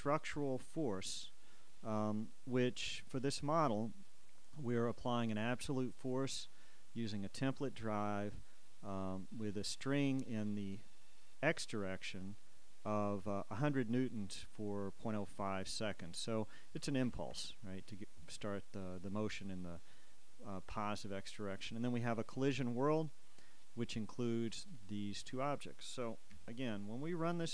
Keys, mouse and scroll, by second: 2.8 click, 3.7 click, 6.2 click, 7.1-9.5 drag, 12.0 click, 17.0 Escape, 19.4 click, 22.0 click, 24.7-26.3 middle drag, 26.5 KP_1.